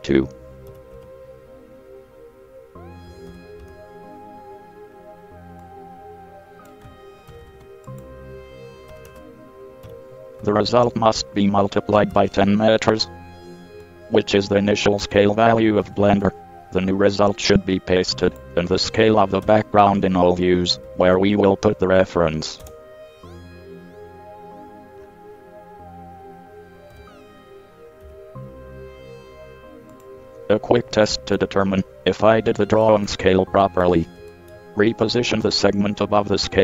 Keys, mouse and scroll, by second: 0.9 KP_7, 1.1 KP_1, 3.3 KP_3, 3.5 KP_2, 3.8 KP_Enter, 7.5 ctrl+c, 7.6 ctrl+c, 9.1 KP_1, 9.3 KP_0, 10.1 KP_Multiply, 11.1 ctrl+v, 12.5 KP_Enter, 16.0 ctrl+c, 16.2 ctrl+c, 18.5-19.7 drag, 19.7-22.8 drag, 27.1 l, 28.2 g, 35.7 g.